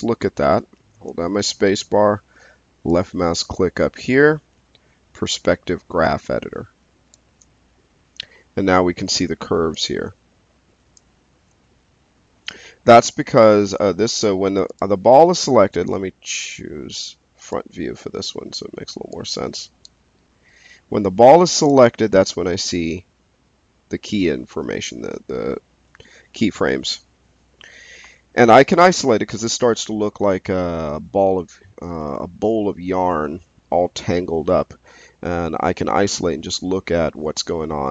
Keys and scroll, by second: 15.8 space.